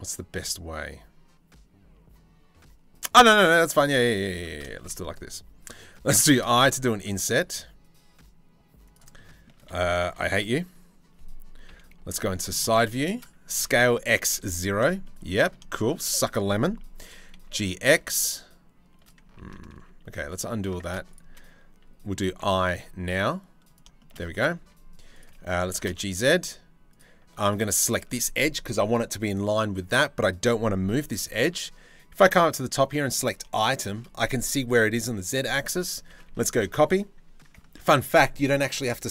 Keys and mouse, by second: 2.8 click, 4.0 Tab, 5.7 i, 9.7 2, 11.3 KP_3, 11.6 KP_1, 12.2 shift+middle click, 13.2 s, 14.4 shift+middle click, 15.2 shift+middle click, 16.7 g, 20.4 ctrl+z, 21.9 i, 24.2 2, 25.2 g, 31.1 n, 33.3 shift+middle click, 35.4 click, 35.9 ctrl+c, 37.4 ctrl+c.